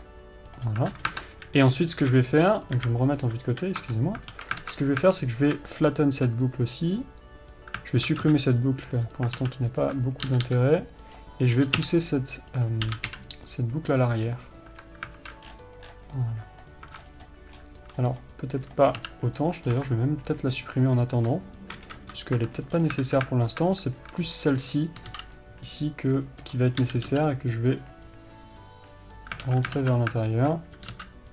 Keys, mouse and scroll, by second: 0.4-5.9 middle drag, 7.3-8.4 right drag, 16.5-23.9 middle drag.